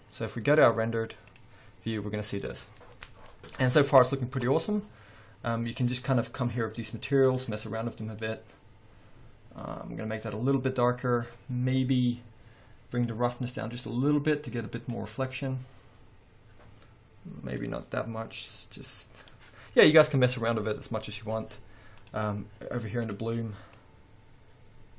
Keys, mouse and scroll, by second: 0.4-0.7 scroll down 1, 0.7 z, 2.2 scroll down 1, 2.7-3.2 scroll up 1, 6.1 click, 7.5 click, 13.3-22.7 drag, 20.1-22.2 scroll up 2, 23.2 click, 24.0-24.9 drag.